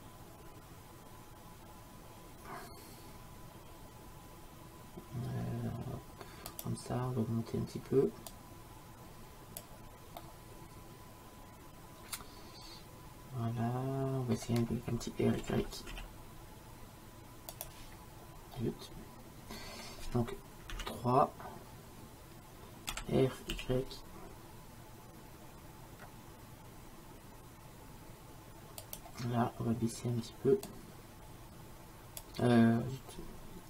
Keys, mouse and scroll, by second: 8.3-10.2 drag, 10.2-12.0 middle drag, 15.4 r, 18.6-20.7 middle drag, 20.7 KP_3, 22.9 r, 30.7-33.6 drag.